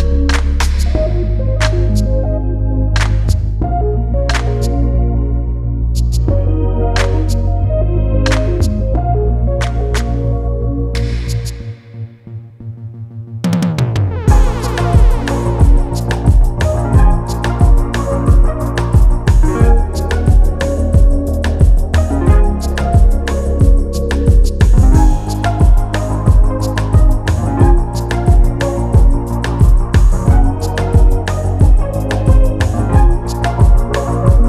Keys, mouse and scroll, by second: 1.5 ctrl+g, 1.8-2.1 scroll down 1, 2.1 scroll up 1, 2.5 scroll down 1, 3.1 click, 4.8 click, 5.7 scroll up 1, 6.8 click, 7.7 scroll down 1, 9.4 click, 12.6 click, 15.7 scroll up 1, 17.2 click, 20.2 ctrl+g, 20.5 scroll down 1, 21.4 click, 24.6 scroll down 1, 26.0 click, 26.2 scroll up 1, 26.9 click, 31.2-31.8 scroll down 1, 31.8 click, 32.1 scroll down 1, 32.5 click.